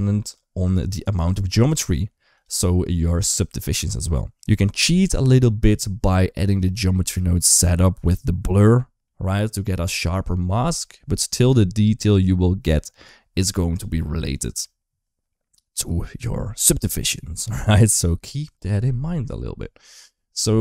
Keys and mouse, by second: 6.4 click, 8.9 middle click.